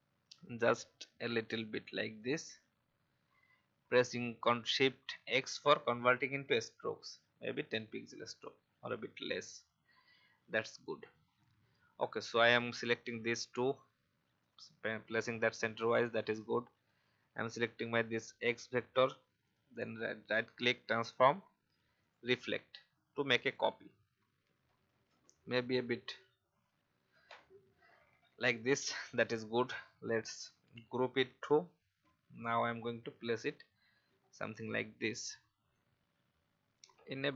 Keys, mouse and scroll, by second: 6.8 shift+scroll up 1, 8.2-9.6 scroll down 1, 9.6 click, 11.2 alt+scroll down 1, 12.1 click, 16.2 click, 18.0 shift+click, 19.4 right click, 22.0 click, 25.0 Right, 25.5 typing, 28.4-30.2 drag, 32.1-34.0 drag, 34.2-34.5 alt+scroll up 1, 35.7-37.3 alt+shift+drag.